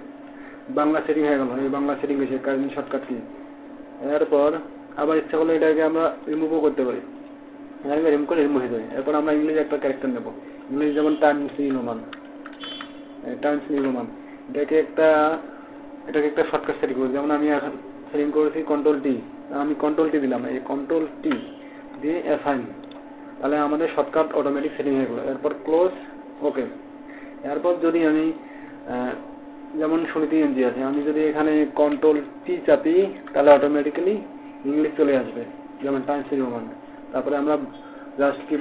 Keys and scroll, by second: 18.7 ctrl+t.